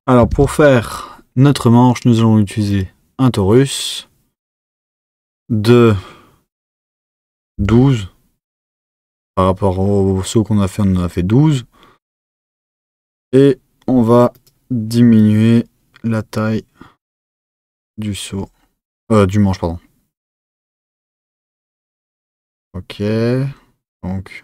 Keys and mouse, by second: 0.3 shift+a, 5.3-8.5 drag, 15.1-18.2 drag.